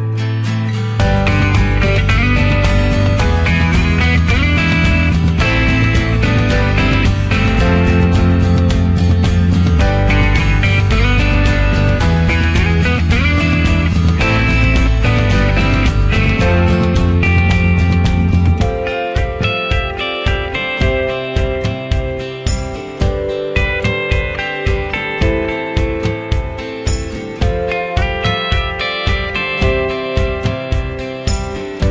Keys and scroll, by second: 18.3 ctrl+z, 27.0 ctrl+z, 27.5 ctrl+z.